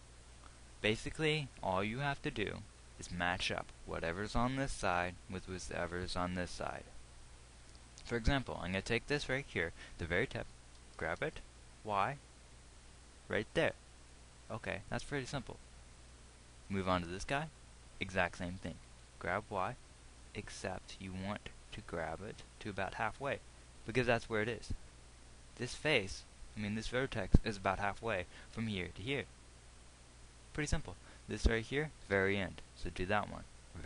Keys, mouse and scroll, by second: 11.5 g, 19.5 g, 32.6 g.